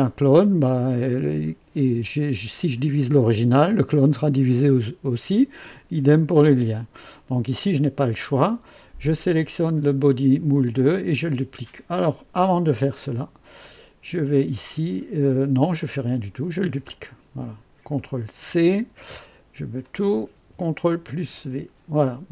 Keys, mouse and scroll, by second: 9.1 click, 13.6 click, 14.0 F2, 14.5 click, 15.7 click, 16.9 click, 18.4 ctrl+c, 19.8 click, 20.9 ctrl+v.